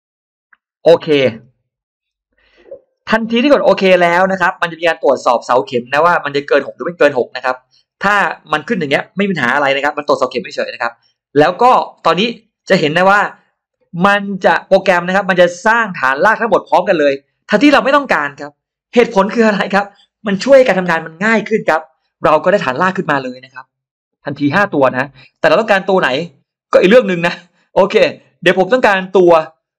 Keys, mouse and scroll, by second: 1.6 click, 3.4 click.